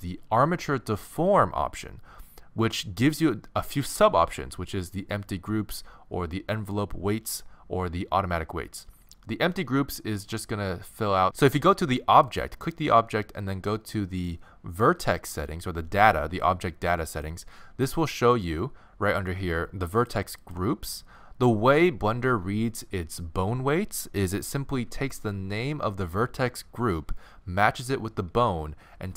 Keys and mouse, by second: 12.3-17.1 right drag, 17.1-20.0 middle drag, 20.0-29.1 drag.